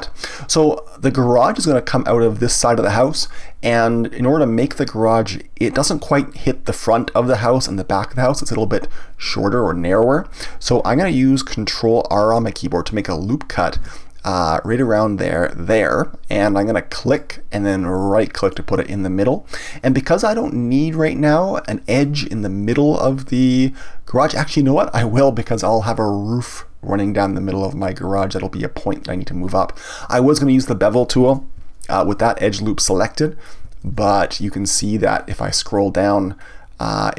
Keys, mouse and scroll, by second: 3.7-6.7 middle drag, 13.8 ctrl+r, 18.5 right click, 25.4-28.4 middle drag, 32.6-33.9 middle drag, 33.9 ctrl+b.